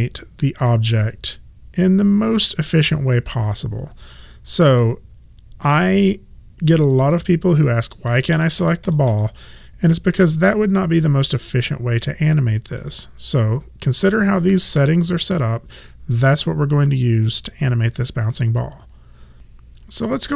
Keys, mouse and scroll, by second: 4.8 click, 8.1 click, 12.8 click.